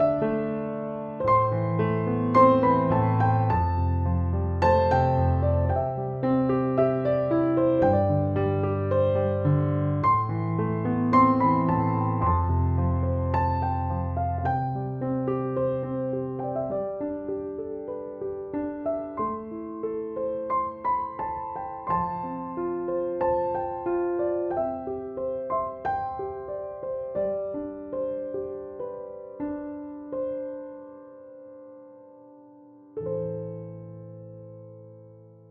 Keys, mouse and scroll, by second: 0.0-35.5 typing, 3.3 click, 5.8 click, 6.7 ctrl+-, 8.0 ctrl+=, 8.5 click, 8.8 click, 9.8 alt+click, 10.8 click, 11.1 click, 12.0 click, 12.5 click, 12.6 click, 14.2 click, 14.4 alt+click, 15.3 click, 16.5 ctrl+-, 16.7 click, 17.7 ctrl+=, 17.9 click, 18.6 ctrl+-, 18.9 click, 19.6 click, 19.9 click, 20.4 ctrl+-, 20.8 click, 21.2 ctrl+=, 21.4 click, 21.9 alt+click, 22.2 click, 22.6 click, 22.9 click, 24.1 click, 25.7 alt+click, 26.0 click, 26.9 click, 27.2 alt+click, 29.7 ctrl+-, 30.5 click, 31.0 click, 31.5 ctrl+alt+r, 34.4 click, 35.4 ctrl+a.